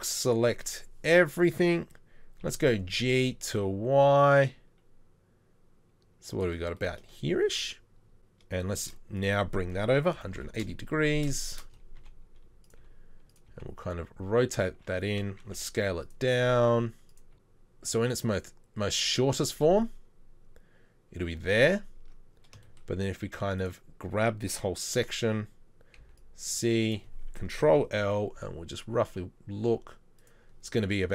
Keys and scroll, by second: 2.5 g, 8.2 Tab, 8.8 shift+d, 10.2 r, 12.0 g, 12.8 g, 12.8 r, 13.5 g, 15.5 s, 16.4 g, 22.0 Tab, 26.0 c, 27.6 ctrl+l, 28.4 g.